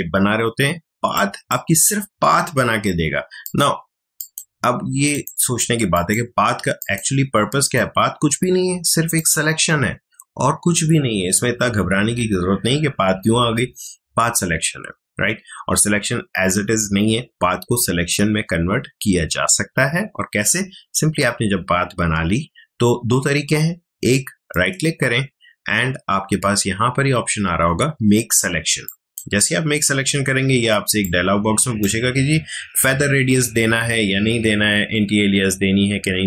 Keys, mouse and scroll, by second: 1.1-3.4 drag, 24.5 right click, 28.8-36.2 drag.